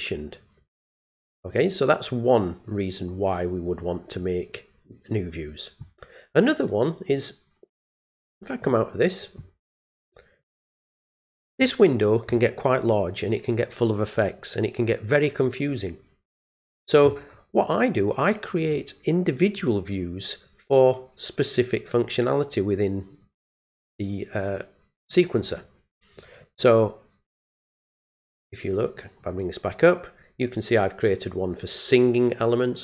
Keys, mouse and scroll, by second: 8.6 click, 11.0-12.9 scroll down 2, 13.0-13.6 scroll down 2, 14.1-16.1 scroll down 1, 16.1-16.8 scroll up 1, 16.8-17.5 scroll down 3, 27.6 right click, 29.0 click.